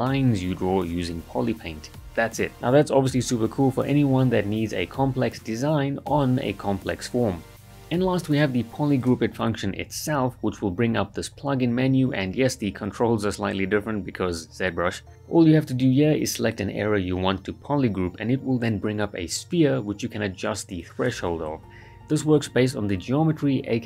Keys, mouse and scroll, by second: 0.0 click, 2.9 click, 3.4 shift+f, 4.1-6.0 ctrl+right drag, 9.0 click, 11.4 click, 12.6-12.9 right click, 12.9-13.2 scroll up 1, 13.2 right click, 13.5-14.7 drag, 17.3 scroll down 1, 17.7 right click, 18.2-19.5 click, 20.3-20.9 right click, 21.3 click, 21.8 shift+f, 21.9-23.0 right click, 22.8 ctrl+shift+click, 22.9 ctrl+shift+click, 23.0 ctrl+w, 23.2 ctrl+shift+click, 23.4 right click.